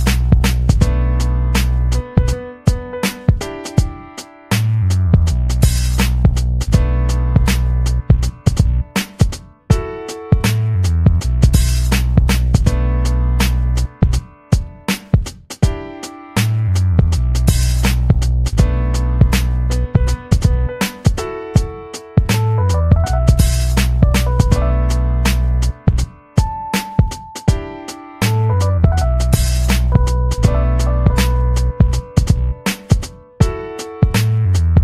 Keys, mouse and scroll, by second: 0.0 ctrl+v, 0.8 ctrl+scroll up 2, 1.3 ctrl+scroll up 2, 1.9-3.6 typing, 4.1 click, 4.5-6.6 drag, 6.7 ctrl+scroll up 2, 8.5 middle click, 9.1 middle click, 9.3 ctrl+scroll down 2, 9.8 ctrl+middle click, 10.2 click, 10.7 ctrl+scroll down 2, 13.6-15.3 drag, 15.4-16.0 ctrl+scroll up 4, 16.9 click, 17.3-18.9 ctrl+drag, 19.7 click, 20.8-22.5 drag, 24.3 click, 25.6 click, 26.5 ctrl+scroll down 1, 27.5 click, 27.8 middle click, 28.5 ctrl+scroll down 1, 30.1 click, 30.8 click, 31.5 ctrl+c, 34.5 ctrl+c.